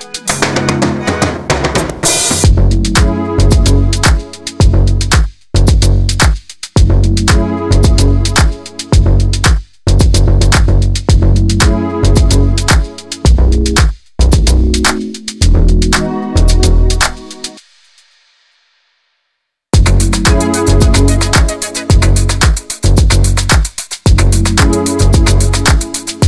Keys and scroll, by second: 0.7 alt+space.